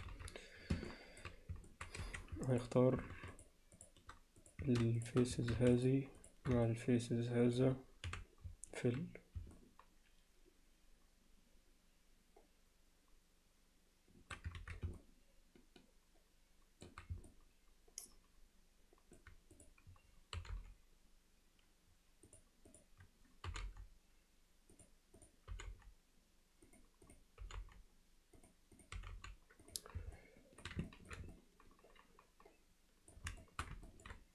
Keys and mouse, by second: 0.9 alt+middle click, 1.7 middle click, 2.0 1, 2.5 middle click, 3.3 click, 3.8 click, 5.8 shift+click, 6.2 shift+click, 6.7 middle click, 8.1 f, 9.6-14.4 middle drag, 14.6 ctrl+z, 15.0-16.9 middle drag, 17.3-19.2 alt+middle drag, 19.6 click, 22.8 click, 25.2 click, 25.5 g, 27.1 click, 27.4 g, 28.8 click, 29.0 g, 30.2 alt+middle click, 30.9 ctrl+alt+middle click, 31.3-33.1 alt+middle drag, 33.4 alt+shift+middle click, 33.9 ctrl+alt+middle click.